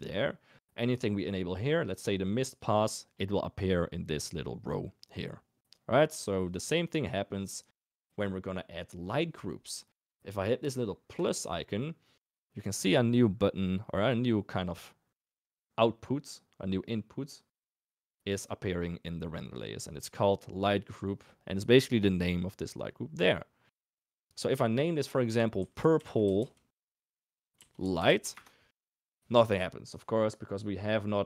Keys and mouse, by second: 2.4 click, 6.4 click, 11.3 click, 19.4 middle click, 21.9 click, 22.1-28.4 drag.